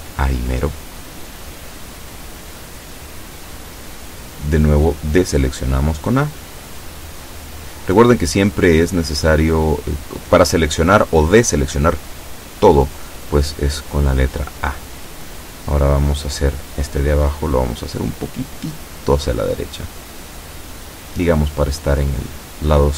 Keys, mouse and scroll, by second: 11.9 a, 12.7 b, 13.9-16.4 drag, 17.9-21.2 drag.